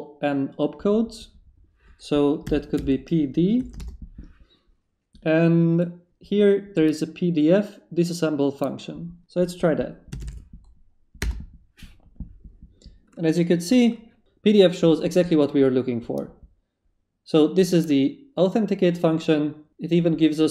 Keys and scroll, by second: 2.4 p, 2.7 d, 3.3 shift+d, 3.6 shift+/, 3.8 shift+Return, 4.8 Return, 10.0-11.3 typing.